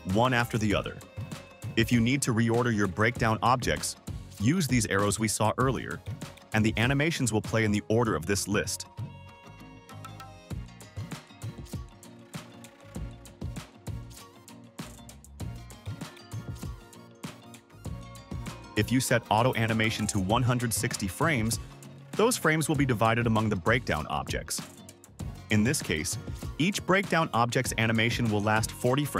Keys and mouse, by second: 0.3 click, 1.4 click, 2.0 click, 4.0 click, 5.2 click, 5.9 click, 8.9 space, 18.7 click, 21.8 click, 25.1 click.